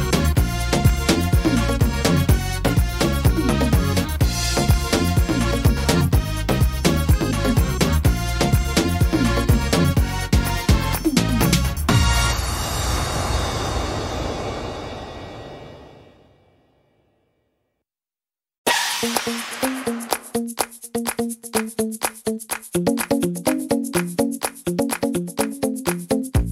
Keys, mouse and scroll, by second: 0.6 click, 0.6 middle click, 0.9-2.0 scroll down 3, 2.2 click, 3.7 middle click, 3.7 scroll down 1, 4.8 right click, 5.2 alt+shift+right click, 6.1 middle click, 7.7 alt+shift+right click, 8.8 middle click, 11.6 x, 13.4 alt+shift+right click, 14.2 alt+shift+right click, 15.1 x, 18.5 right click, 19.7 x, 20.8 middle click, 23.0 right click, 23.8 x, 24.7 middle click, 26.2 right click.